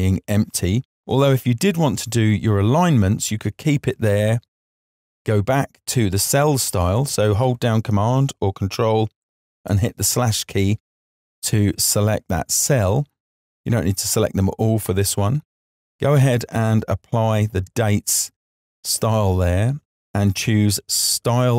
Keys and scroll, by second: 8.0 super+/.